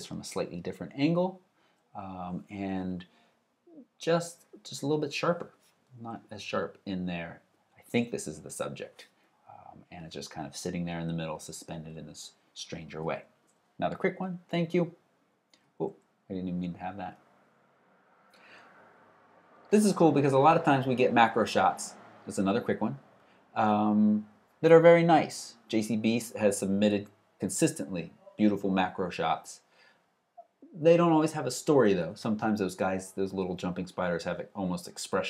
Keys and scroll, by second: 14.0 alt+super+Right.